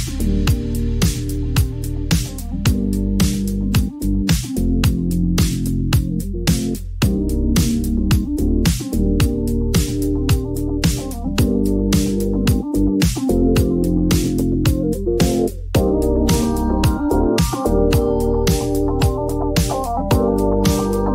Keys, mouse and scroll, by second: 0.0 click, 1.3-2.5 typing, 5.5 click, 6.1 ctrl+d, 6.9 ctrl+d, 7.4 ctrl+d, 8.1 ctrl+d, 8.7 ctrl+d, 12.2 click, 12.8 click, 15.8-16.9 middle drag, 17.4 click, 18.1-20.7 typing.